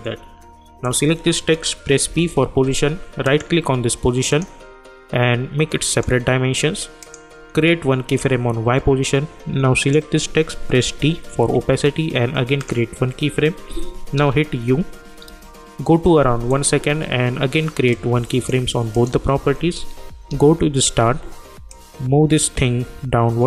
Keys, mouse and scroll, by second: 2.0 p, 3.2 click, 4.3 right click, 5.9 click, 12.6 click, 14.1 u, 15.3 =, 16.5 click, 20.3 j, 21.7-23.4 drag.